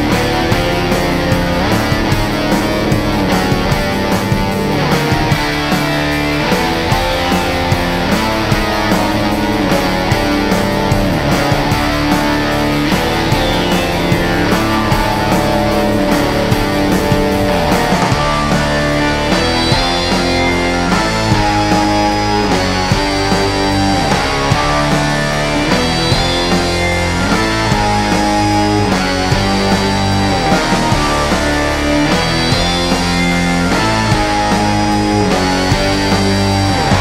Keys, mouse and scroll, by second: 3.4 click, 6.0-7.6 alt+scroll down 2, 8.7 ctrl+z, 9.2 click, 12.5 click, 16.0 ctrl+z, 16.4-20.6 drag, 21.0-24.1 drag, 24.1 ctrl+z, 24.5-27.3 drag, 27.4 click, 28.2 click, 31.5 right click, 32.7-37.0 drag.